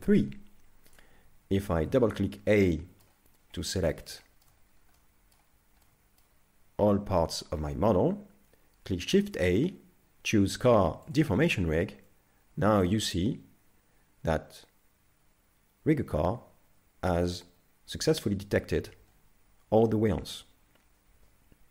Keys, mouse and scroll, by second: 0.3-1.6 scroll down 2, 1.6 a, 1.8 a, 2.5 shift+middle click, 3.6 middle click, 4.2 shift+middle click, 4.7 scroll down 2, 5.0 middle click, 5.9 middle click, 9.1 shift+a, 12.5 z, 12.8 middle click.